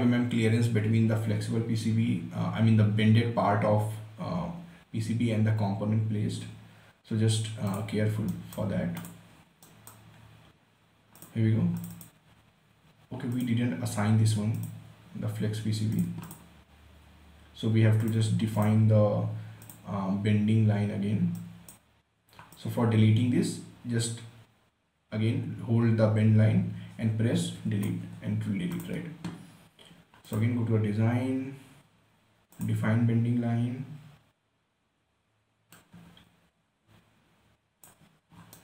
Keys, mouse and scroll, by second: 8.0 click, 8.6 right click, 9.1 scroll down 1, 9.3 click, 9.7 scroll down 1, 9.9 right click, 10.5 scroll up 1, 11.5-29.1 drag, 32.9 click, 36.1-38.6 drag.